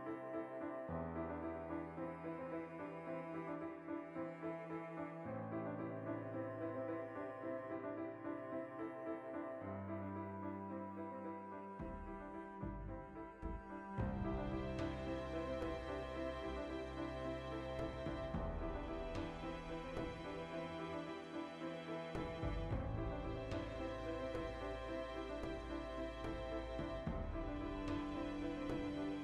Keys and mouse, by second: 2.9 alt+q, 4.6 ctrl+r, 4.9 right click, 5.5 alt+q, 5.7 z, 6.0-8.7 shift+middle drag, 6.2 a, 6.6 b, 7.2 g, 8.7 click, 8.9-14.6 ctrl+shift+middle drag, 13.9 ctrl+z, 14.2 g, 14.6 click, 14.9 2, 15.2 alt+shift+right click, 15.9 ctrl+b, 17.5 click, 17.8-19.4 middle drag, 18.0 z, 19.4 shift+right click, 19.9 s, 20.6 click, 20.7 middle click, 21.5 shift+right click, 22.0 s, 22.6 click, 22.9-29.2 ctrl+middle drag, 25.1 2.